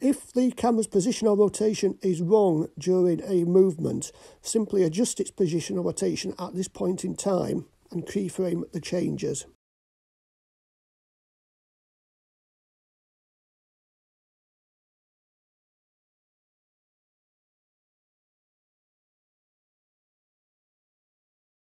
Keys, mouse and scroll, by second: 0.4 drag, 1.7 click, 1.9-5.2 drag, 8.1 g, 8.9 middle click, 16.3-16.9 shift+drag, 19.5 r.